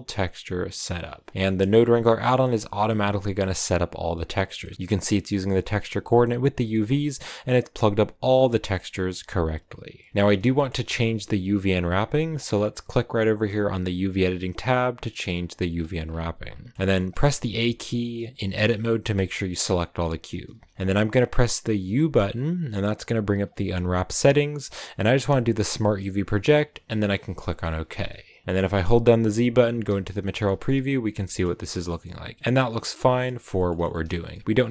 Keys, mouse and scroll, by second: 0.0-1.1 drag, 1.1-1.7 scroll down 4, 1.7-2.9 middle drag, 2.9 click, 4.7-10.4 drag, 10.4-14.3 shift+middle drag, 14.3 click, 15.2-15.7 scroll down 3, 16.7 shift+middle click, 17.3 a, 17.7 a, 18.3 shift+middle click, 18.5-18.8 scroll up 3, 18.8-26.9 middle drag, 29.8 z, 30.5 middle click, 31.5 scroll up 1, 31.6 middle click, 32.5 scroll down 2, 32.7 shift+middle click, 33.4 scroll up 1, 33.6 shift+middle click, 34.0 scroll down 1, 34.2-34.7 middle drag.